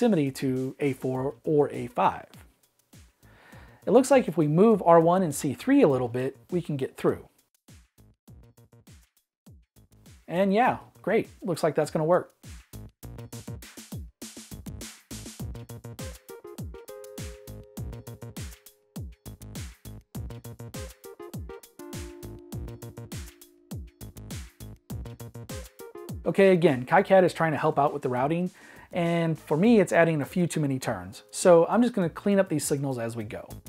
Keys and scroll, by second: 2.6 m, 5.6 m, 11.6 Escape, 25.7 Escape, 32.9 Escape.